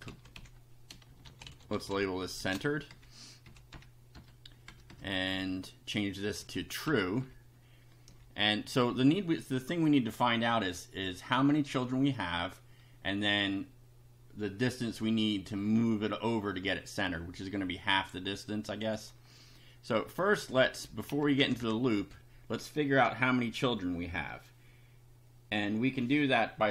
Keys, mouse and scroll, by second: 0.0 shift+Right, 0.1 shift+End, 0.4 shift+Delete, 0.9-2.4 typing, 2.9 shift+Down, 3.5 Up, 3.7 Home, 4.2 BackSpace, 4.7 Down, 5.3 Right, 6.4 Up, 6.9 Delete, 7.2 Down, 8.1 Up, 10.6 click, 18.8 click, 20.4 Up, 21.1 End, 21.4 Return, 22.0 Up.